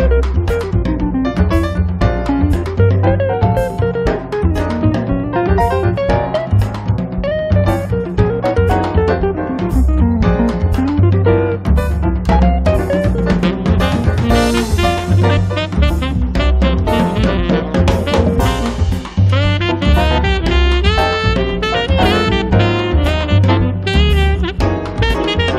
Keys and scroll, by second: 6.7 space, 7.6 Escape, 23.9 space, 24.8 space, 25.4 Escape.